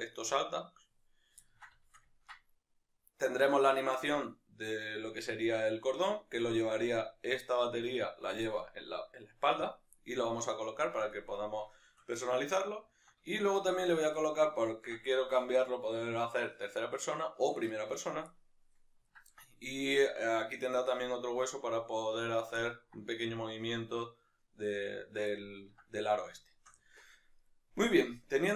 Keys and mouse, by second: 0.2 right click, 1.5-6.2 ctrl+middle drag, 6.2-11.8 right drag, 11.8-18.4 shift+middle drag, 22.6 ctrl+middle click, 26.4 shift+middle click.